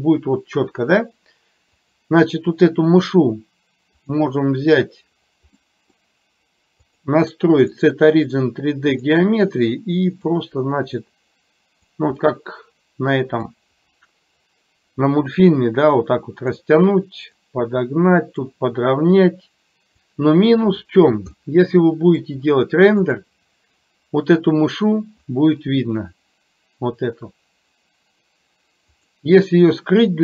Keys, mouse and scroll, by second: 2.0 click, 4.1 click, 5.7-6.1 middle drag, 7.0-9.2 drag, 10.5-12.0 drag, 12.3-13.7 middle drag, 15.2-16.7 drag, 17.6-18.6 drag, 19.3 click, 21.5-22.5 middle drag.